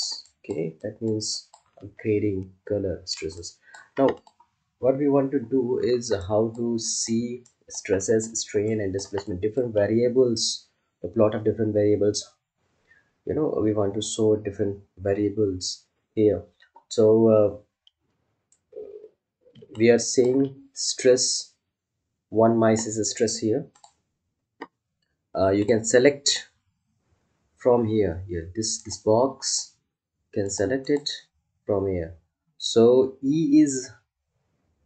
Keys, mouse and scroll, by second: 3.3 alt+click, 6.2-9.2 ctrl+alt+drag, 19.5 ctrl+Num_Lock, 19.7-23.0 ctrl+alt+drag, 23.7 click, 28.8 click.